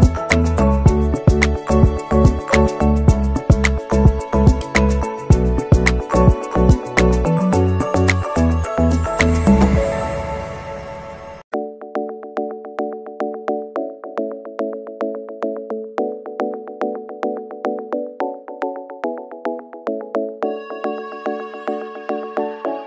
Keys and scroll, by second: 8.9 space.